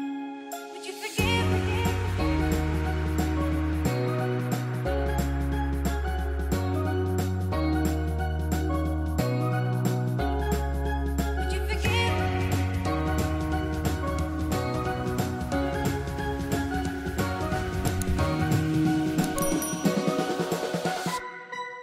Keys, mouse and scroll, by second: 6.4 click, 13.1 click, 14.6 space, 14.7 click, 16.7 space, 16.8 click, 21.4 click.